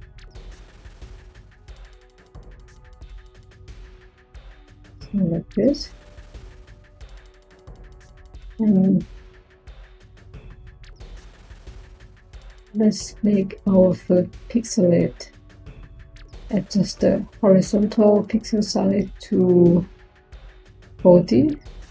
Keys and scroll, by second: 19.9-21.1 typing.